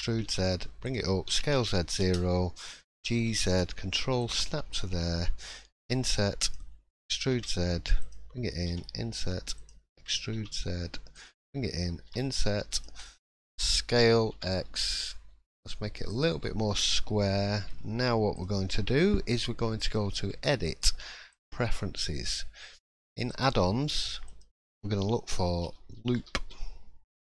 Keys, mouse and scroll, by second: 3.7 s, 3.7 g, 4.6-5.3 scroll up 3, 5.8 i, 7.0 e, 13.0 middle click, 14.0 s, 16.4-16.7 scroll down 4, 16.7 middle click, 17.4 shift+middle click, 17.7-18.3 scroll up 2, 18.3 click, 18.3-18.7 scroll up 1, 19.8 click.